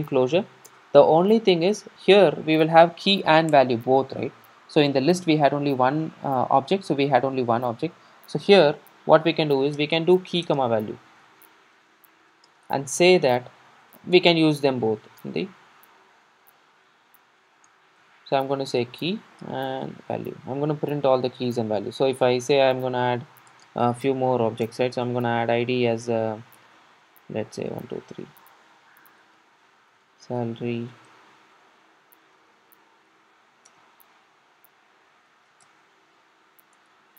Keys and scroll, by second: 0.0 Return, 14.8 Return, 18.8 super+d, 22.0 super+d, 22.0 super+s, 24.7 Return.